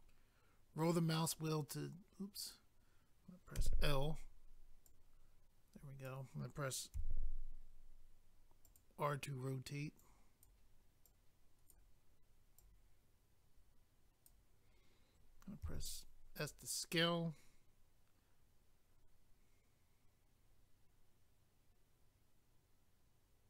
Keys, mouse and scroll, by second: 0.0 scroll down 1, 1.3 click, 2.3 right click, 2.5 click, 3.5 i, 4.8 click, 7.0 r, 8.7 click, 8.8 click, 10.0 click, 11.0 click, 12.6 click, 13.6 click, 15.6 s, 16.4 click, 16.5 click.